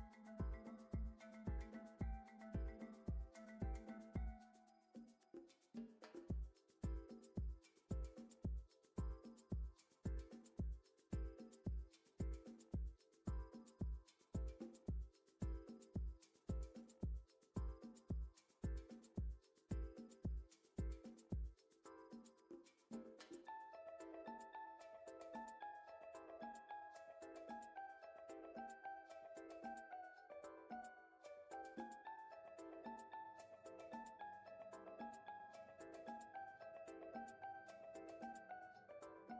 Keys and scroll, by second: 0.2 shift+a, 1.2 m, 1.5 a, 1.7 p, 2.3 Return, 22.3 shift+a, 34.9 typing, 35.2 Return.